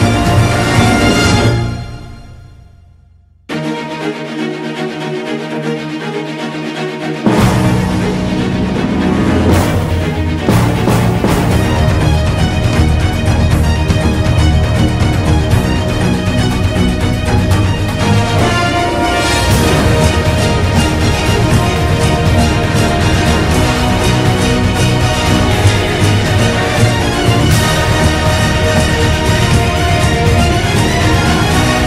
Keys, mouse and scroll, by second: 0.5 ctrl+z, 1.3 ctrl+z, 4.6 ctrl+z, 6.4 ctrl+z, 8.9 ctrl+z, 9.6 ctrl+z, 10.1 ctrl+-, 11.0 ctrl+z, 13.1 ctrl+z, 15.1 ctrl+z, 15.3 ctrl+=, 16.0 ctrl+z, 16.4 ctrl+z, 19.5 ctrl+-, 21.4 ctrl+z, 23.8 ctrl+z, 25.0 ctrl+z, 27.1 ctrl+z, 28.1 ctrl+z, 29.4 ctrl+z, 30.0 ctrl+=, 30.4 ctrl+z.